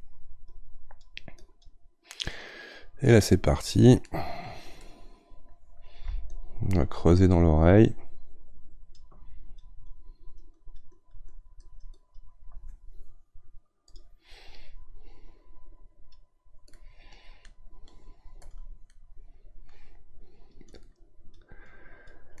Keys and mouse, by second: 4.8-6.3 middle drag, 6.3-18.9 ctrl+drag, 18.9-20.4 middle drag, 20.4-22.4 drag.